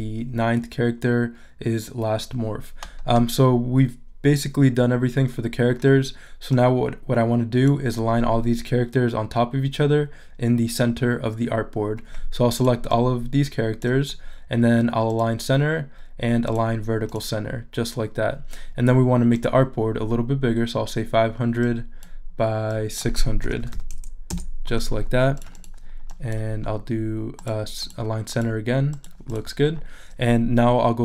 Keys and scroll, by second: 23.2-24.1 typing.